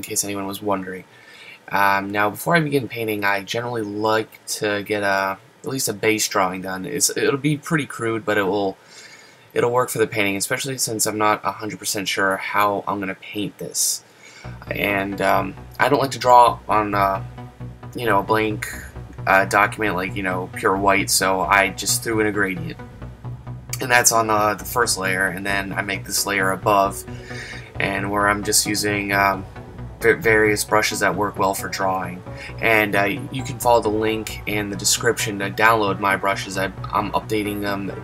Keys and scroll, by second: 2.6 ctrl+z, 18.7 super+z.